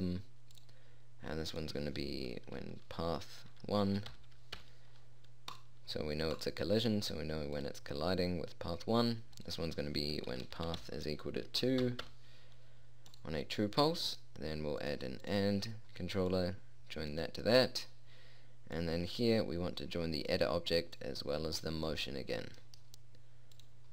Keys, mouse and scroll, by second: 0.1-6.3 drag, 6.9 click, 15.3-17.1 drag, 18.1-22.2 drag, 23.1-23.9 middle drag.